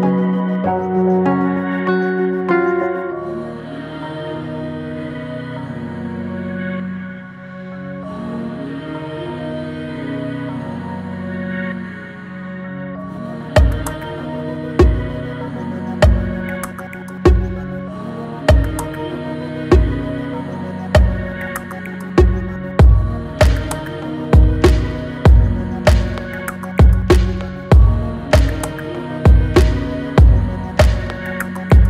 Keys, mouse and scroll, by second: 4.0 Tab, 4.4-5.3 middle drag, 5.3-6.2 right drag, 6.2-6.7 scroll down 3, 6.7-7.8 middle drag, 7.8 scroll down 1, 8.1-10.1 middle drag, 10.2 shift+a, 15.1 alt+middle click, 16.2 s, 19.2 alt+middle click, 20.9 s, 22.6 alt+z, 23.4-25.3 middle drag, 25.8 alt+middle drag, 26.2 scroll up 1, 27.0 s, 29.3-29.7 middle drag, 29.7-30.2 scroll down 1, 30.2-31.6 middle drag, 31.6 g.